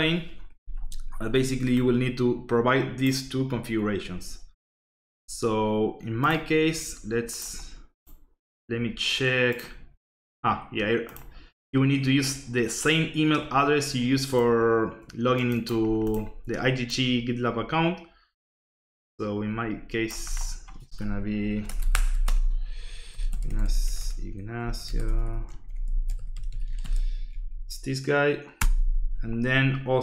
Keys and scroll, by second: 21.2 Left, 21.5 Escape, 21.6 BackSpace, 22.1 Escape, 22.8-27.3 typing, 28.6 Return.